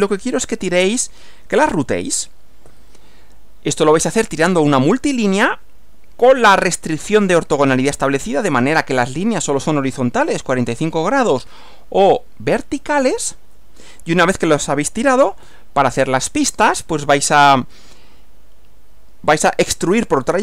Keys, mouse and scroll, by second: 2.7 Right, 15.5 Right.